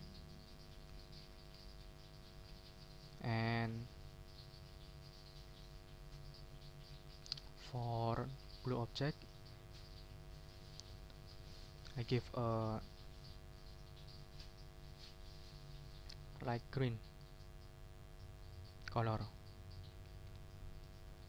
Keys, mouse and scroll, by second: 0.2 click, 0.9 ctrl+z, 1.2 ctrl+scroll up 2, 1.7 ctrl+shift+click, 1.8 ctrl+shift+scroll up 1, 2.4-2.7 ctrl+shift+scroll down 1, 2.8-3.2 ctrl+shift+scroll up 1, 3.2 ctrl+scroll down 1, 3.8 ctrl+click, 4.7 ctrl+scroll down 2, 5.4-7.0 ctrl+drag, 7.3 ctrl+scroll up 2, 7.8 ctrl+click, 8.7 ctrl+click, 9.0 ctrl+shift+middle click, 9.3 ctrl+shift+click, 9.8 shift+middle click, 10.0 ctrl+shift+click, 10.2 ctrl+shift+scroll down 2, 10.5 ctrl+click, 11.7 click, 19.2 click, 20.0 ctrl+z, 20.8 ctrl+click.